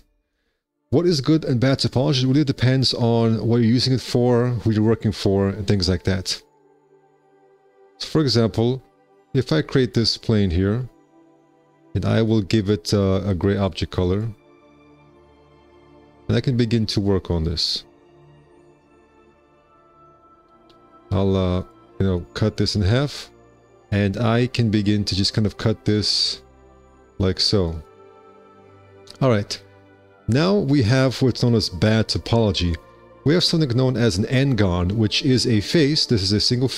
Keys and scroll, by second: 8.0 w, 15.7 1, 16.6 r, 18.3 g, 18.8 2, 19.6 q, 20.9 shift+r, 21.2 c, 22.7 x, 23.0 1, 24.2 alt+c, 29.0 1, 33.3 4, 35.4 4.